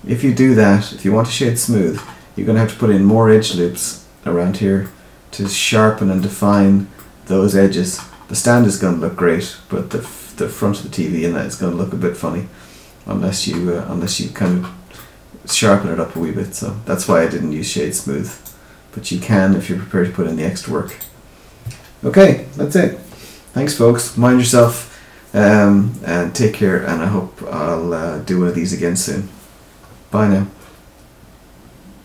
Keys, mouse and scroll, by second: 4.8 middle click, 6.1 middle click, 8.5 middle click, 10.5 middle click, 14.0 middle click, 14.9 middle click, 15.6 scroll down 2, 16.1 middle click, 18.2 right click.